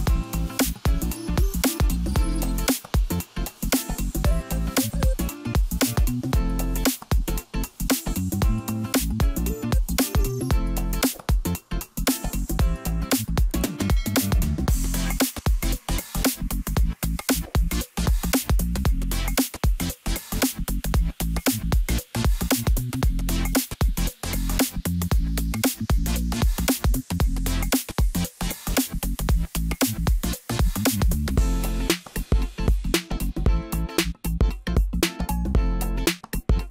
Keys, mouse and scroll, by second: 0.9 ctrl+a, 2.1 Tab, 2.9 a, 3.9-5.2 drag, 5.2 e, 8.0 s, 10.0 g, 12.6 s, 15.5-17.0 scroll up 1, 17.0 e, 20.5 scroll down 2, 20.7 middle click, 21.6-22.3 scroll up 2, 22.3 2, 22.9 click, 24.7-27.3 drag, 27.3-28.6 middle drag, 28.6-29.7 drag, 29.7 middle click, 30.3-31.0 scroll up 2, 31.0 click, 31.6 click, 32.8 shift+click, 33.0 shift+click, 33.5-34.8 middle drag, 34.8 shift+click, 35.0 shift+click, 36.3 shift+click, 36.5 shift+click.